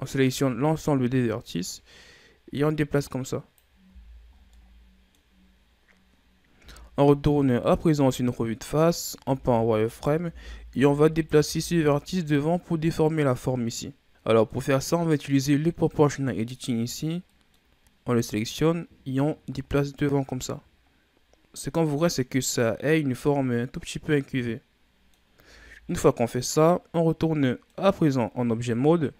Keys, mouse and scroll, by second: 1.2-3.8 drag, 3.8 z, 4.3 scroll down 3, 4.4-6.5 middle drag, 6.5 KP_1, 7.7-9.1 shift+scroll up 7, 9.1 z, 9.8 right click, 10.1 b, 11.3 z, 11.6 scroll down 4, 11.9-13.1 middle drag, 13.1-14.1 scroll up 3, 14.1-16.4 middle drag, 16.4 click, 17.2-18.4 middle drag, 18.4-21.4 drag, 21.7-24.7 middle drag, 25.3 Tab, 26.1-29.1 middle drag.